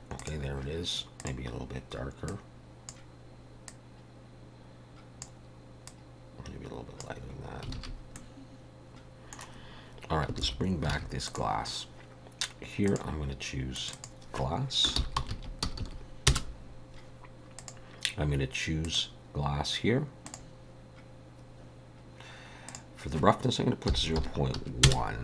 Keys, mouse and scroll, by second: 0.2 click, 1.2 click, 7.8 alt+a, 8.2 middle click, 10.4 alt+h, 10.9 alt+a, 11.3 click, 12.9 click, 13.8 click, 13.9 click, 15.8 s, 17.6 click, 18.9 click, 22.7 click.